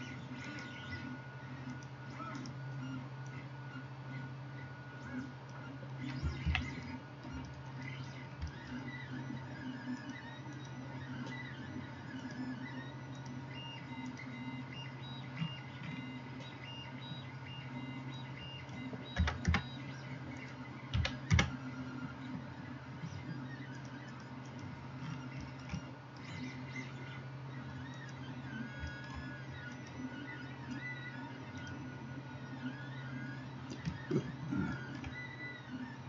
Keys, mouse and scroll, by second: 0.0-1.8 middle drag, 0.5 right click, 1.8-30.0 drag, 2.4 middle click, 2.4 right click, 6.5 ctrl+z, 31.8-36.0 drag.